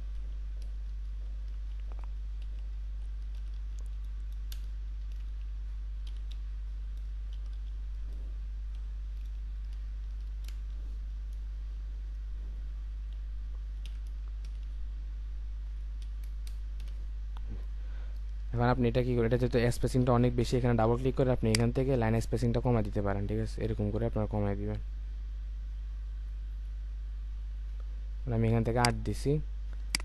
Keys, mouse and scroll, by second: 1.1 typing, 2.4-3.8 typing, 5.1-6.1 typing, 7.3 typing, 8.8-10.0 typing, 13.9-14.4 typing, 16.0 typing, 20.0 typing, 22.3-23.0 typing, 25.1 typing, 25.3-26.0 scroll up 1, 26.0-26.6 scroll down 1, 27.4 typing.